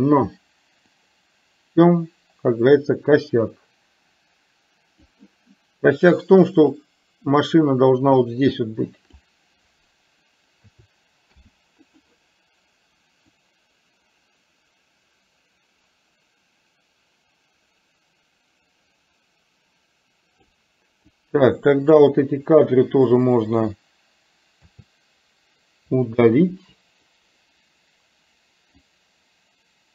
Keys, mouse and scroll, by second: 1.1-5.2 drag, 6.7-9.3 drag, 10.7 a, 11.4 i, 13.6-20.6 drag, 21.2-22.1 drag, 24.7 a, 26.6 Delete, 28.9-29.9 drag.